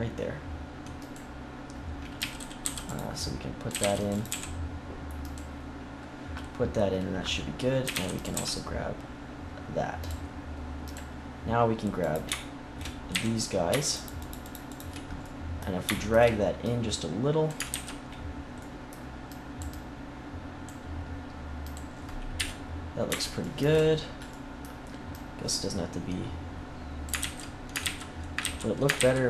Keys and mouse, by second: 1.0-2.1 drag, 2.1 a, 2.6 c, 3.6 a, 3.7 c, 4.2 g, 7.8 a, 7.9 c, 8.3 g, 11.2 click, 11.9-13.0 drag, 13.0 z, 15.1 click, 17.6 ctrl+z, 18.0 click, 18.4 middle click, 19.6 click, 21.8 click, 22.3 KP_1, 22.5 click, 25.0-27.0 drag, 27.1 ctrl+z, 27.8 ctrl+z, 28.3 ctrl+z, 28.9 ctrl+z.